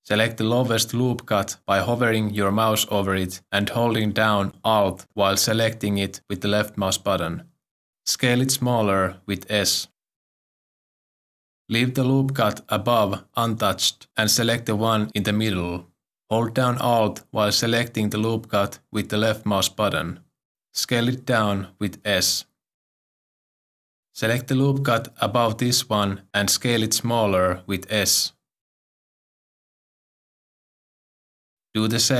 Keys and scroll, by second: 5.1 1, 9.2 s, 19.4 s, 21.3 s, 28.2 s.